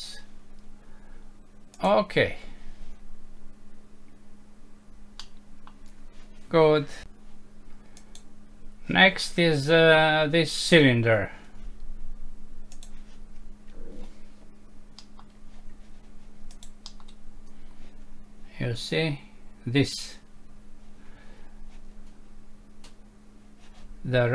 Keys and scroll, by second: 5.2 F6, 15.0 Home.